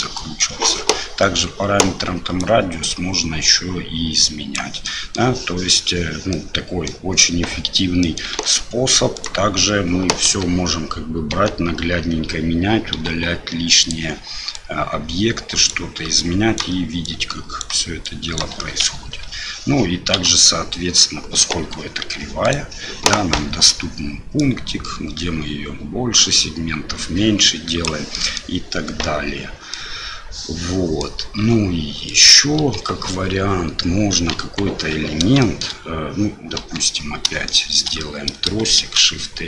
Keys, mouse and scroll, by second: 0.1 middle click, 2.5-4.6 drag, 4.8 middle click, 6.3 middle click, 8.0 middle click, 8.3 Tab, 9.1 click, 10.2 KP_7, 11.3 Tab, 12.9 Delete, 14.5-15.7 drag, 16.2 click, 17.0 click, 18.0 click, 18.6 middle click, 22.0 Tab, 22.4 click, 24.4-27.8 drag, 28.1 middle drag, 29.7-31.0 middle drag, 31.4 Delete, 32.1 click, 32.6 Delete, 34.4 KP_1, 35.4 shift+middle drag, 36.6 KP_7, 37.4-37.8 shift+middle drag, 38.8 shift+a.